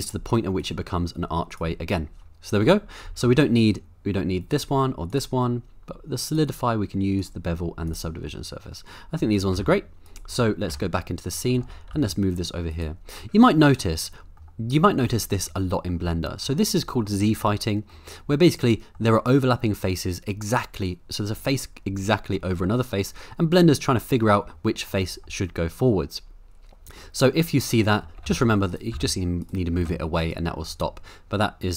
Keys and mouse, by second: 0.0 click, 0.6 click, 1.5 click, 3.1 middle click, 4.5 click, 5.1 click, 6.3 click, 7.2 click, 7.9 click, 8.3 middle click, 9.5 g, 11.4 middle click, 11.6 g, 11.9 y, 12.7-13.1 right drag, 13.1-14.4 middle drag, 15.5 middle click, 16.4 middle click, 17.9-18.9 middle drag, 22.4-24.6 middle drag, 24.9 middle click, 27.0-28.0 middle drag, 28.2 g, 28.3 y, 28.7 right click, 28.9 g, 29.4 right click, 29.8 g, 30.2 right click, 30.6-31.7 middle drag.